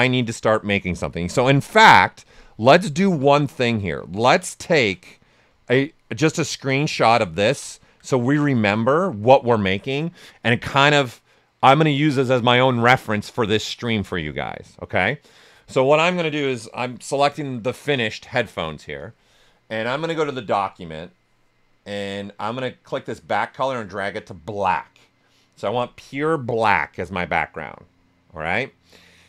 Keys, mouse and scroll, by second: 1.6 click, 3.8 ctrl+right click, 4.7 shift+f, 4.9 right click, 19.7 ctrl+click, 23.2-29.2 ctrl+drag.